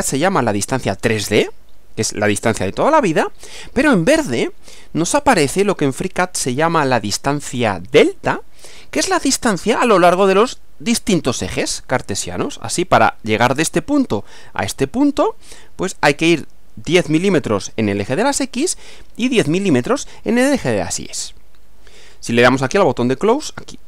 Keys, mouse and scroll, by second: 23.1 click.